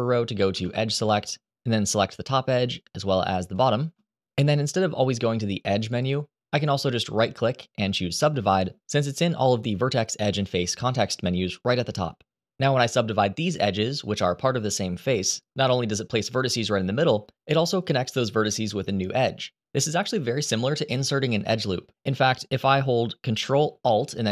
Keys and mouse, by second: 0.2 2, 5.6 click, 7.0-12.6 right drag.